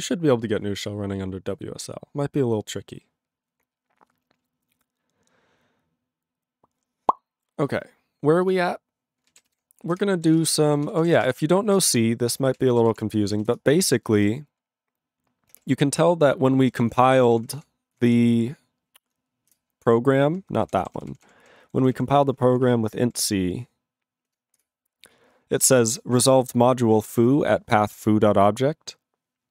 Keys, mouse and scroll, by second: 8.4 click, 10.1 ctrl+Return, 10.1 ctrl+a, 10.3 ctrl+space, 10.4 ctrl+e, 10.4 ctrl+g, 10.8 ctrl+s, 11.0 ctrl+a, 11.1 ctrl+space, 11.2 ctrl+e, 11.2 ctrl+g, 12.0 Return, 12.6 ctrl+s, 12.7 ctrl+a, 12.8 ctrl+space, 12.9 ctrl+e, 12.9 ctrl+g, 13.6 Return.